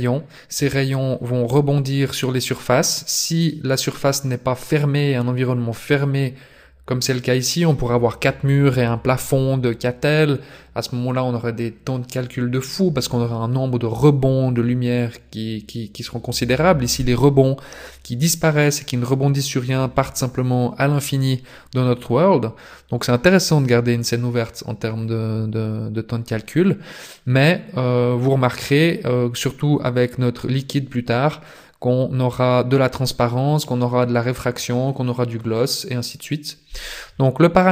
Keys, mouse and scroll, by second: 0.5 KP_0, 28.0-28.5 scroll down 2.